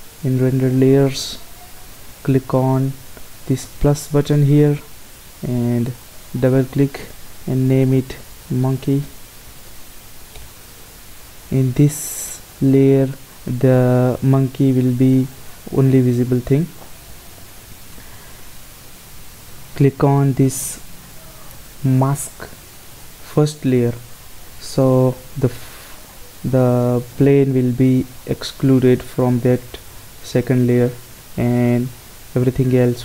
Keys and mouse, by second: 0.3-8.0 drag, 23.0-24.9 drag.